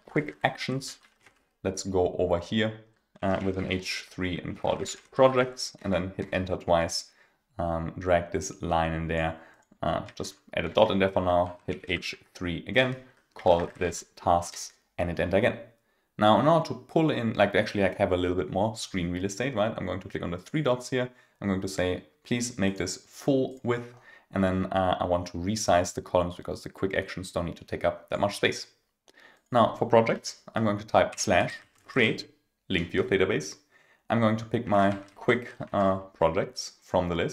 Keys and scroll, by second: 3.7 Return, 10.6 Return, 32.8 Return.